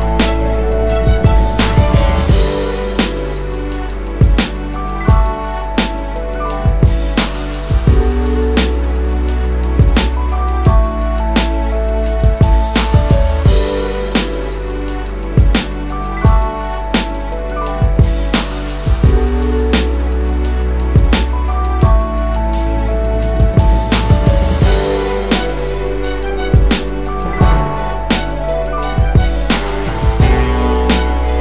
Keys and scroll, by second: 23.3 typing, 24.9 typing, 28.7 space, 31.0 space.